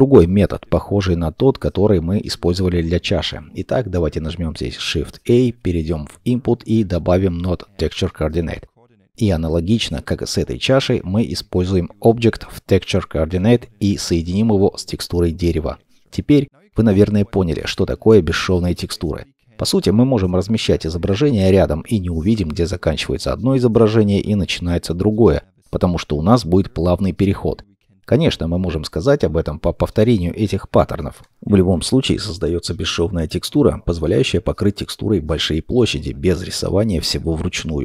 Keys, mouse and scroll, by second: 0.2-0.8 scroll down 1, 0.8 middle click, 2.6-3.1 scroll, 5.6 shift+a, 16.2 shift+middle click, 18.3 middle click, 18.9-23.3 scroll up 1.